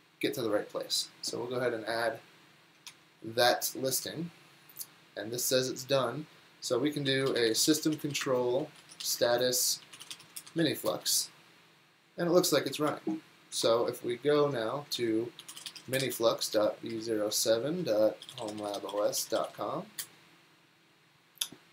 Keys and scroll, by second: 2.9 super+Tab, 6.9-11.4 typing, 12.9 ctrl+c, 13.6 super+Tab, 15.2-20.5 typing.